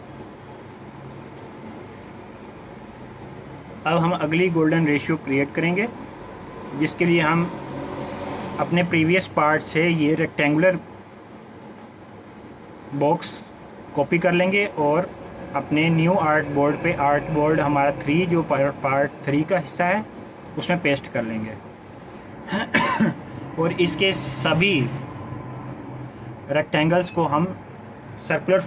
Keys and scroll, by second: 27.2 ctrl+g.